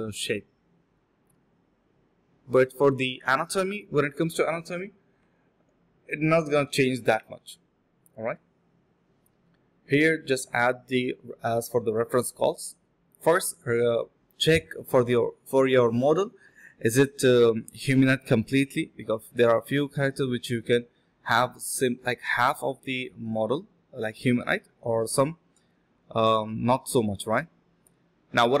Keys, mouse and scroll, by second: 0.4 alt+click, 0.5 alt+click, 0.8 typing, 1.2 double click, 5.3 double click, 6.5 double click, 10.2 shift+click, 10.8 alt+click, 11.1 1, 12.0 double click, 13.7 shift+click, 14.3 shift+click, 14.6 alt+click, 14.7 alt+click, 15.8 double click, 17.2 f, 17.8 ctrl+shift+click, 18.4 d, 18.4 alt+click, 18.6 alt+click, 18.7 alt+click, 19.0 alt+click, 19.1 alt+click, 20.2 alt+click, 21.6 ctrl+shift+click, 23.5 ctrl+shift+click, 25.1 ctrl+alt+shift+click, 26.7 ctrl+alt+shift+click, 27.9 ctrl+alt+shift+click.